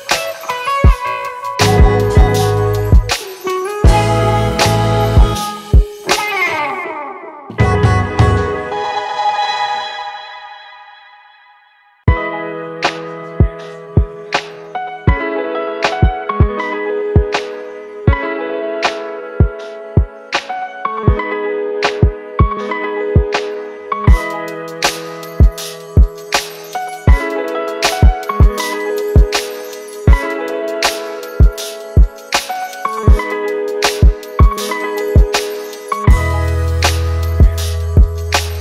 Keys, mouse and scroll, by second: 11.4 double click, 17.8 double click.